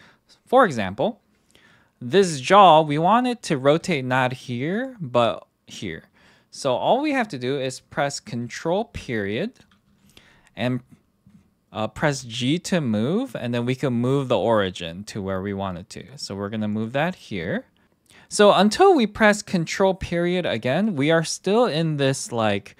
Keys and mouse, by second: 2.2 KP_3, 3.8 r, 8.8 ctrl+., 12.1 g, 16.7 click.